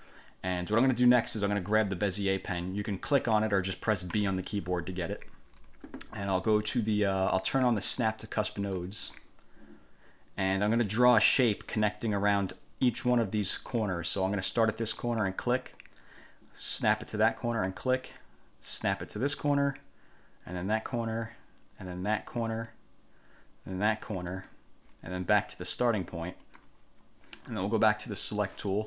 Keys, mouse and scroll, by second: 4.3 b, 8.8 click, 15.5 click, 17.8 click, 19.6 click, 20.9 click, 22.7 click, 24.5 click, 26.6 click, 28.4 click.